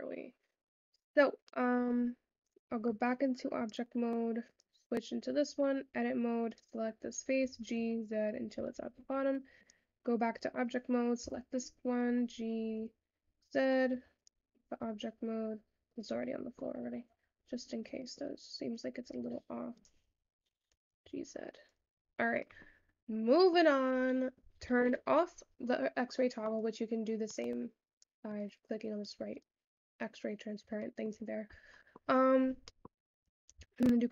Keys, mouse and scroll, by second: 0.9-1.6 scroll up 3, 1.6-3.2 middle drag, 3.2 Tab, 3.7 click, 4.6 click, 5.6 Tab, 6.7 click, 9.2 Tab, 9.6 click, 10.5 click, 11.3 Tab, 12.1 click, 14.0 Tab, 14.2 click, 14.8 click, 16.0-17.0 middle drag, 17.0 scroll up 1, 17.2 Tab, 18.0 scroll up 1, 18.1 middle click, 18.8-19.8 scroll down 3, 19.8 click, 21.9 Tab, 22.1-22.5 scroll down 8, 22.5 middle click, 22.8-23.4 scroll up 3, 23.4-23.7 middle drag, 23.7-25.1 scroll up 1, 25.1 alt+z, 26.4-30.9 drag, 30.9 shift+middle click, 31.5-32.4 scroll up 3, 32.4-32.9 scroll down 2, 32.9-34.1 scroll up 1.